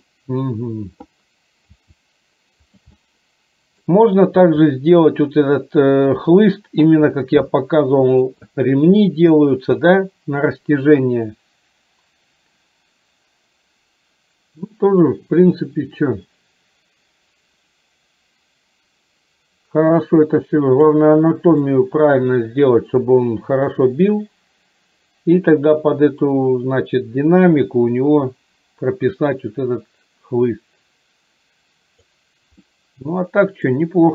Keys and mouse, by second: 1.8 g, 3.0 middle click, 4.5 g, 7.2-8.3 middle drag, 11.4-21.0 drag, 21.7 shift+middle click, 23.2-32.2 drag, 32.8 middle click.